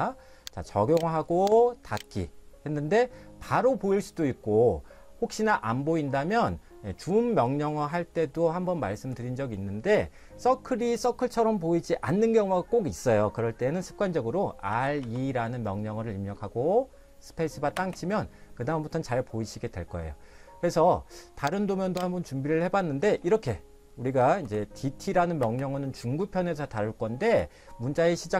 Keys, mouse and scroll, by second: 0.9 click, 14.7 r, 15.0 e, 17.8 space, 21.9 click, 24.2 d, 24.4 t, 25.4 space.